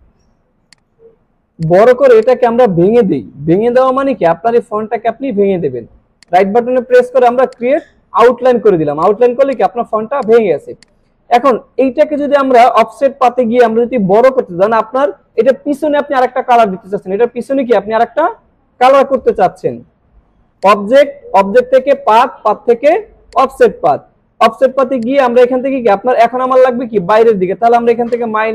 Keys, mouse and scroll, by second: 0.5 space, 0.7 click, 1.2 alt+scroll up 1, 1.6-2.7 drag, 6.2 right click, 7.5 click, 10.4 click, 20.6 click, 23.3 click, 25.0 click, 28.1 click.